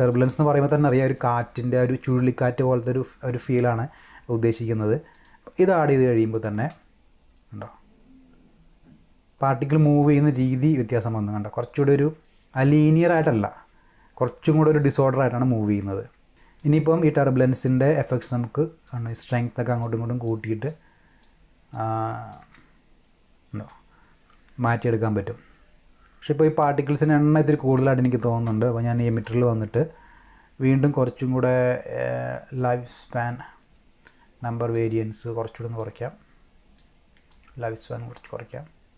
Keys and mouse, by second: 0.0 click, 5.1 click, 6.3 click, 6.6 space, 16.6 click, 18.8-19.3 drag, 19.8-20.2 drag, 20.7 click, 21.7-22.3 drag, 22.4 space, 28.3 space, 29.1 click, 34.0 click, 35.2 click, 36.8 click, 38.1 space.